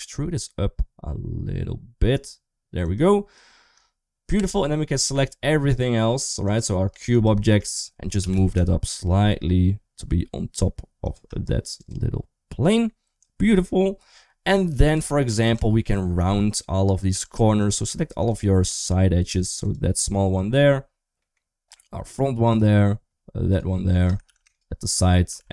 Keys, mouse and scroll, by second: 4.2 Tab, 6.3 click, 6.9 shift+click, 8.0 g, 11.6 click, 15.4 Tab, 15.4 2, 16.9 2, 17.4 click, 19.4 click, 21.0 middle click, 23.3 shift+click, 24.1 ctrl+z, 25.2 alt+z.